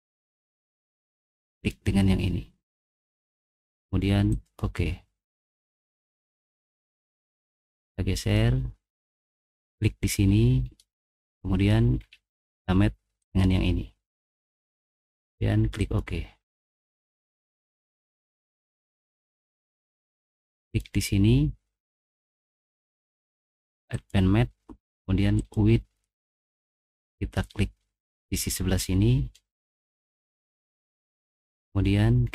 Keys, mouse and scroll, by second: 1.6 click, 3.2 click, 4.3 click, 5.7 middle click, 6.3 middle click, 7.4 click, 8.8 middle click, 9.5 click, 10.5 scroll down 1, 10.8 middle click, 12.0 scroll down 1, 12.3 middle click, 13.2 click, 15.8 click, 16.5 middle click, 16.8-18.0 middle drag, 17.0 scroll up 2, 18.2-18.5 scroll down 2, 18.7 middle click, 20.6 click, 22.7 click, 23.9 click, 24.1-24.6 scroll down 2, 25.3 click, 26.2 middle click, 26.6 middle click, 28.2 right click, 29.3 middle click, 29.3 click, 29.6 middle click, 29.8 middle click, 31.0 middle click.